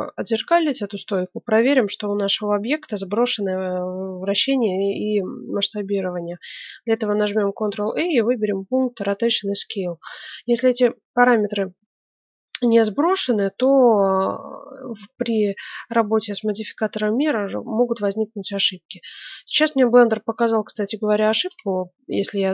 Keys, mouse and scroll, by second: 7.4 ctrl+a.